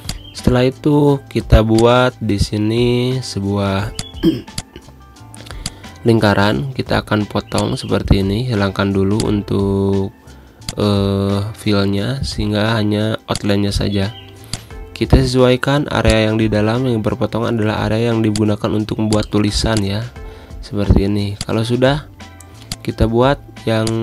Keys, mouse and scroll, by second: 3.8 z, 4.0 click, 4.4 space, 4.5 click, 5.1 v, 5.6-7.5 drag, 10.7 click, 11.5 Pause, 13.4-18.6 drag, 18.6-23.9 drag.